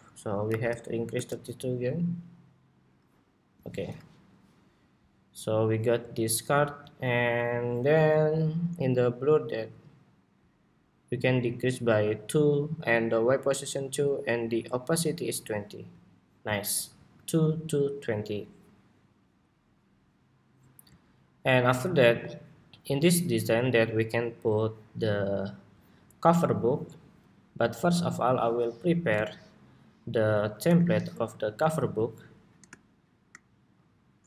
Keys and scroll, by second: 16.7 super+s.